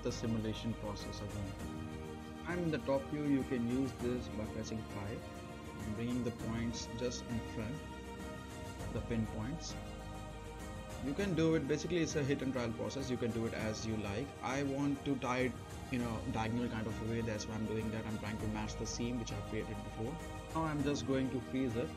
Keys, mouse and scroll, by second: 2.6 space, 2.6-8.2 drag, 8.7-11.5 right drag, 15.9 space, 19.1 space, 19.2 click, 19.6 right click, 21.1 click.